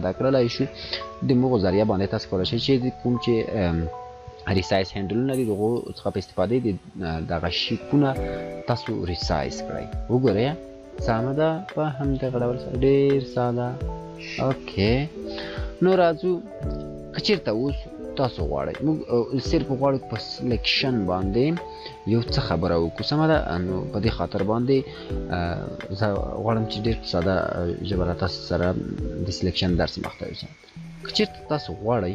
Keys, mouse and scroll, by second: 1.8-2.7 alt+shift+drag, 5.8 alt+shift+click, 6.4-6.9 scroll down 2, 6.9 scroll up 1, 9.7-10.6 drag, 15.4 ctrl+=, 19.2 ctrl+-, 22.6 ctrl+-, 29.0-30.4 drag.